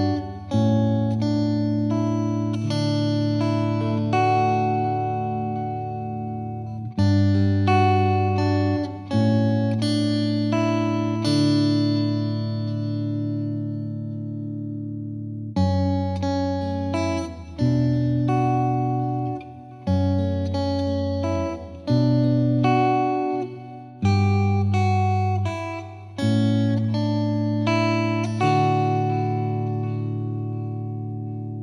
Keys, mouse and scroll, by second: 1.6 right click, 1.8-5.7 drag, 5.7 scroll up 1, 6.0-6.6 scroll down 2, 6.6-9.4 scroll down 1, 9.4-10.0 scroll down 1, 11.3-12.2 drag, 13.1-14.6 scroll down 2, 14.6-16.2 shift+middle drag, 16.2-25.6 drag, 25.6-27.2 middle drag.